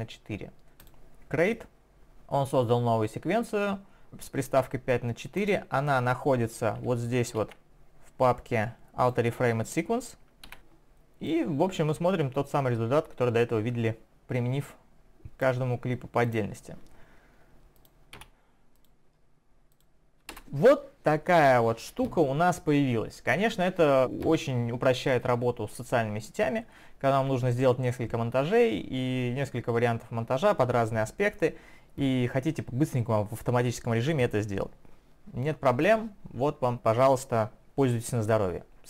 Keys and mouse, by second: 1.3 click, 12.3 click, 16.3 click, 17.8 click, 17.9 click, 18.2 Delete, 18.8 click, 19.8 click, 20.4 Return, 20.4 click.